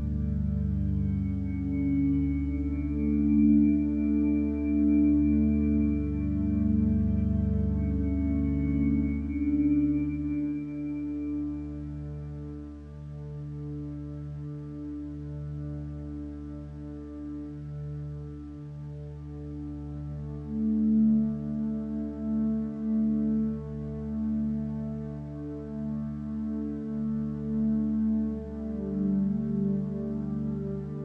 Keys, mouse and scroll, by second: 11.1 p, 12.0 p.